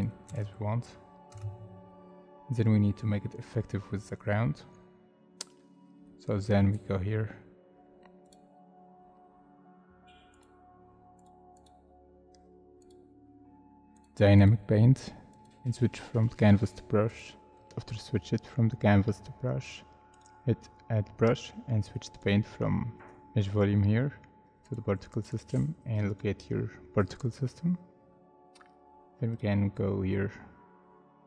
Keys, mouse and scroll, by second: 0.3 space, 1.3 space, 4.6 scroll down 1, 11.5 double click, 17.7 double click, 20.1 double click, 27.6 scroll down 1.